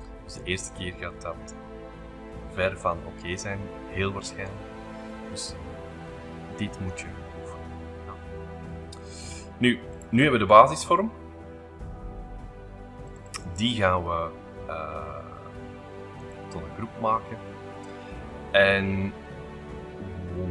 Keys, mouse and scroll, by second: 0.0 middle click, 0.4-1.8 scroll up 2, 1.9-3.7 middle drag, 2.6 scroll, 3.1-6.6 scroll up 2, 7.0 middle click, 7.8-9.7 scroll up 3, 9.9 click, 13.0 click, 14.1-16.2 right drag, 16.2 click, 17.2-18.7 scroll up 2, 18.7-20.5 shift+middle drag.